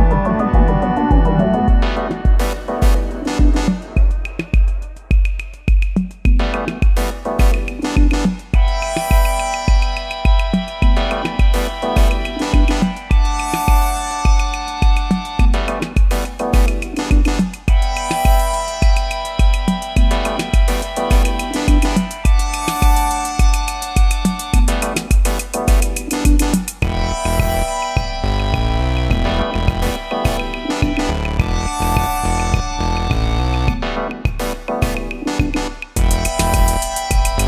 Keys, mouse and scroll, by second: 10.1 ctrl+t, 11.2 alt+shift+click, 15.1 alt+shift+click, 17.7 alt+shift+click, 21.3 Return, 22.7 Down, 24.7 Up.